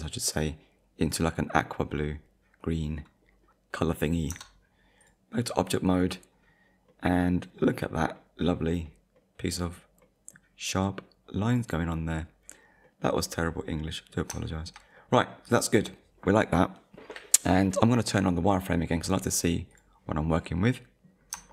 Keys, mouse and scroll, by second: 4.3 Tab, 5.0 click, 5.9 click, 6.3-6.7 scroll down 1, 6.9 middle click, 7.7-8.2 scroll down 1, 8.2 middle click, 8.7-9.1 scroll down 1, 9.2 middle click, 12.0 middle click, 12.8 middle click, 14.1-14.5 scroll up 2, 14.5 shift+middle click, 15.0 middle click, 15.5 click, 19.7 click, 20.3 click, 20.6 middle click.